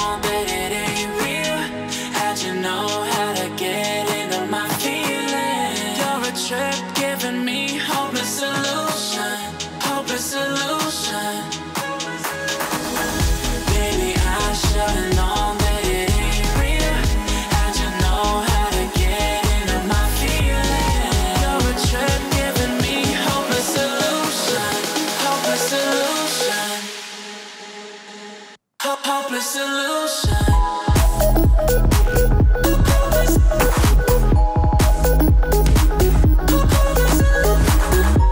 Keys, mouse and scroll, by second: 0.3 Right, 2.9-3.6 click, 4.2-4.5 alt+scroll down 1, 4.9 click, 5.2 alt+scroll down 1, 5.7 alt+scroll up 1, 6.6 click, 6.7 click, 8.1 Right, 10.0-10.3 click, 10.8 Left, 12.5-13.0 alt+scroll up 1, 13.7-14.1 drag, 18.2-18.9 alt+scroll down 2, 18.9-20.1 alt+scroll up 2, 21.2-23.6 drag, 28.0 click, 29.8 alt+scroll up 1, 30.4-32.8 drag, 36.6-37.4 alt+scroll down 2, 37.4 click, 38.2 alt+scroll down 2.